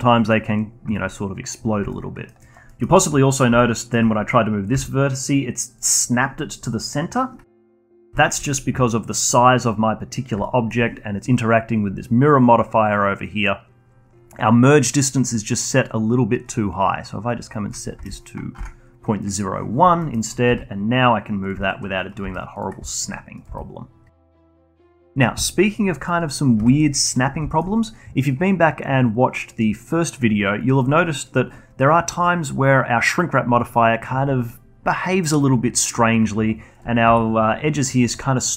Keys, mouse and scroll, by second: 1.5 click, 1.9-2.4 alt+middle drag, 2.4 alt+click, 2.7-4.7 alt+middle drag, 4.7 g, 7.8 ctrl+z, 8.1-9.8 alt+middle drag, 9.8 scroll down 1, 10.0 scroll up 1, 10.4-13.5 alt+middle drag, 16.5-19.5 drag, 20.0 middle click, 20.1 middle click, 20.5 g, 21.6 alt+click, 22.2 g, 22.9 alt+click, 23.5 g, 24.4 alt+click, 25.3 g, 25.6 middle click, 26.6 Tab, 27.1 click, 27.5-28.8 alt+middle drag, 28.8 click, 29.2 click, 29.6 click, 29.9 click, 30.2 click, 30.5 click, 30.9 click, 31.2 click, 31.7-32.5 alt+drag, 32.7 click, 33.1-34.7 alt+middle drag, 34.7 click, 34.9 click, 35.2-36.7 alt+drag, 37.0 alt+middle click, 37.9 alt+h.